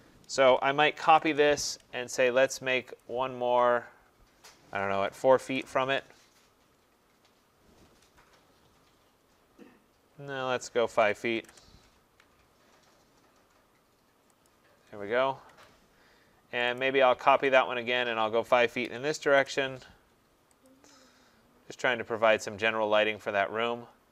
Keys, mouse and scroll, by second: 0.6-1.6 typing, 3.0 click, 4.8-5.6 typing, 7.0-7.8 typing, 10.7-11.5 typing, 14.5 shift+click, 15.5 Escape, 15.7-16.5 typing, 16.8 right click, 17.6 click, 18.8 typing, 20.7 shift+click, 20.7 typing, 21.2 middle click, 21.3 middle click.